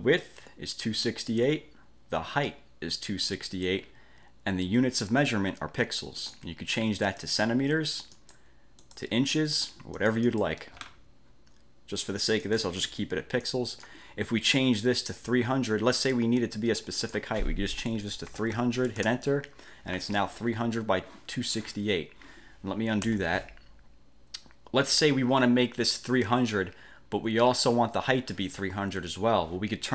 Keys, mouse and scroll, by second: 6.3 click, 7.3 click, 8.2 click, 9.0 click, 9.5 click, 10.1-10.8 drag, 11.0 scroll up 2, 12.6 click, 13.6-14.2 drag, 15.4 click, 18.2-19.1 typing, 23.2 ctrl+z.